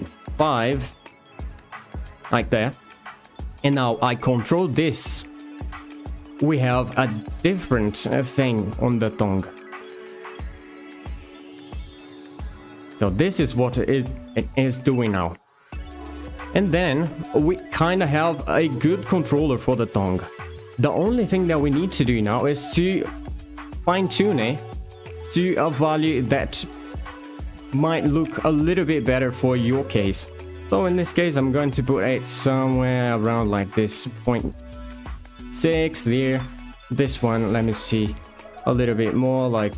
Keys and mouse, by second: 2.6 shift+middle click, 3.3 click, 4.4 r, 7.8 right click, 8.7 g, 11.8 r, 12.6 click, 13.0 g, 16.3-16.6 drag, 17.4 r, 19.9-20.2 drag, 23.3 click, 25.5-33.4 shift+drag, 35.6 click, 37.2-39.7 shift+drag.